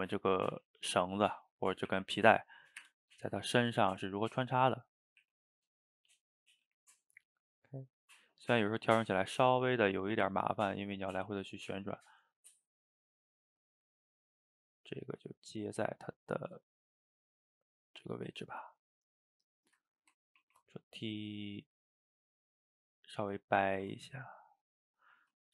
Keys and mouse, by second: 0.4-1.4 middle drag, 1.4 click, 1.9 r, 3.7 g, 5.2 r, 6.7 g, 8.4-9.3 middle drag, 9.3 g, 10.9-14.0 middle drag, 14.0 click, 14.8 g, 16.3 click, 16.4 g, 17.6-19.5 middle drag, 19.5 shift+click, 19.9-20.4 middle drag, 20.4 ctrl+t, 22.3 middle click, 22.9 click, 23.0 middle click, 23.7 ctrl+t, 25.2 middle click.